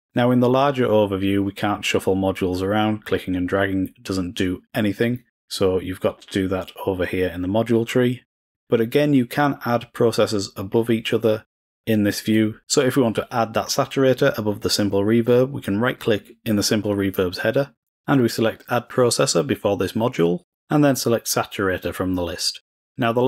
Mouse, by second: 0.0 click, 1.4-2.3 drag, 2.5-3.9 drag, 12.3-13.3 drag, 15.9 right click, 22.2 click.